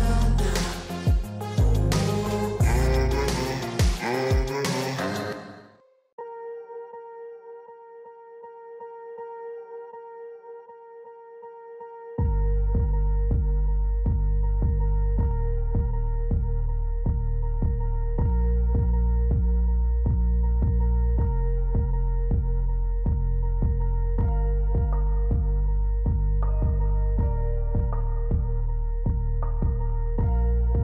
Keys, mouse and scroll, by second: 5.1 ctrl+z, 6.4-9.5 middle drag, 11.8 click, 14.6 click, 17.2-20.3 drag, 23.2 click.